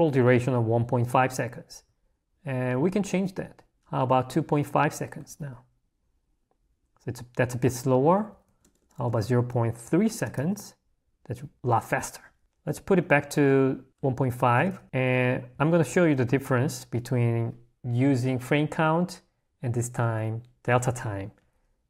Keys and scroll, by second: 1.0 h, 4.5 r, 5.1 Escape, 7.8 l, 8.4 a, 10.4 Escape, 12.4 a, 14.7 Escape, 15.5 g.